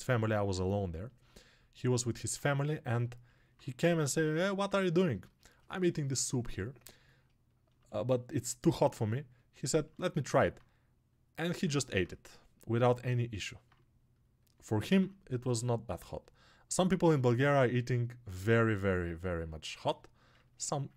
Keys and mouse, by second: 9.0-11.5 alt+right drag, 11.5-16.6 alt+drag, 16.6-20.7 alt+right drag, 20.7-20.9 ctrl+alt+drag.